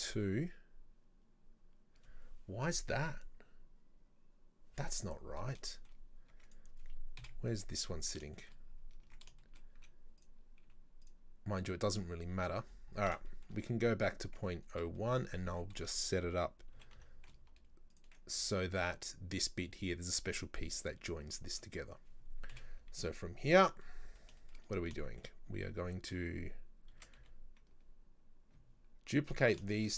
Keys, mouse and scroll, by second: 0.2-3.2 scroll down 2, 3.2-4.0 scroll down 5, 4.9-5.7 scroll down 3, 5.7 shift+middle click, 6.4 Tab, 6.5 right click, 7.2 KP_7, 8.0-8.4 scroll up 2, 8.4-8.7 shift+middle drag, 9.1 Tab, 9.4 shift+middle click, 9.8 z, 10.7 z, 12.7-13.3 scroll down 10, 13.3 shift+middle click, 14.2 scroll up 3, 14.4 Tab, 14.7 right click, 15.0 shift+middle drag, 15.3 scroll up 2, 15.5 Tab, 15.8 a, 16.8 g, 21.4 shift+middle click, 21.7-22.5 scroll down 1, 22.5 KP_7, 23.0 z, 23.7 scroll down 2, 23.9 middle click, 24.7-25.1 scroll up 3, 25.1 shift+middle click, 25.2-25.8 shift+scroll down 1, 25.8 Tab, 27.0 shift+d, 29.7 shift+right click.